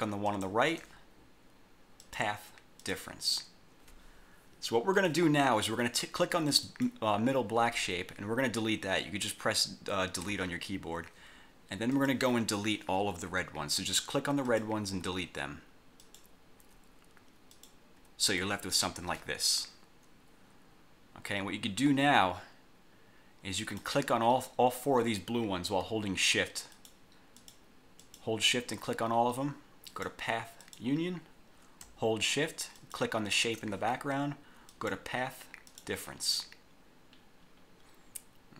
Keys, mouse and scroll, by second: 0.4 shift+click, 2.2 click, 2.9 click, 5.1 click, 5.5 scroll down 1, 6.8 click, 10.4 Delete, 12.0 click, 13.4 Delete, 14.6 click, 15.0 Delete, 16.1 click, 16.7 Delete, 17.6 click, 18.1 Delete, 23.7 click, 26.8 shift+click, 27.4 shift+click, 28.1 shift+click, 30.0 click, 30.7 click, 32.9 shift+click, 34.8 click, 35.8 click, 36.7-37.0 scroll down 2, 37.0-37.7 scroll up 2.